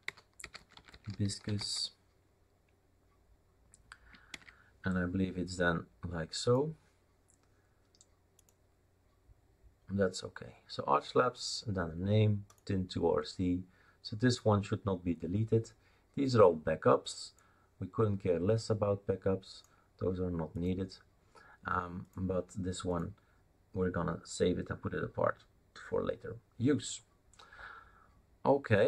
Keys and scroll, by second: 0.0-2.1 typing.